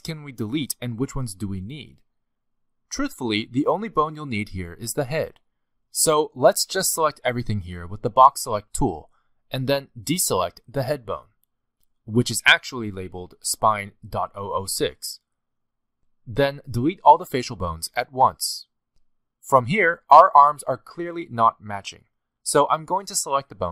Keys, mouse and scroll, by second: 0.1 a, 1.4 alt+a, 1.9 b, 3.6 middle click, 4.8 click, 8.2 b, 11.7 c, 13.1 b, 15.6 middle click, 16.0 b, 16.5 middle click, 17.7 middle click, 17.7 g, 18.9 x, 20.0 middle click, 21.0 scroll down 5, 21.5 shift+middle click, 22.6 click, 23.1 shift+middle click.